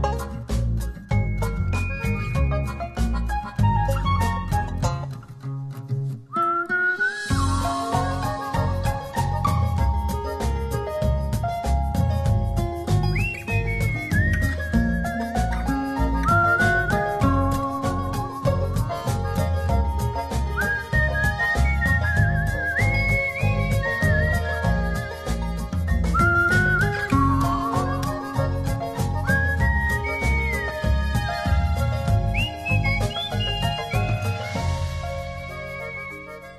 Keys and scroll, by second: 7.9 super+t, 10.3 v, 11.1 shift+v, 13.1 shift+super+t, 13.6 alt+super+t, 19.9 shift+Right, 20.7 shift+Down, 25.9 shift+Up, 26.6 shift+Left, 27.4 Return, 29.9 b, 31.1 [.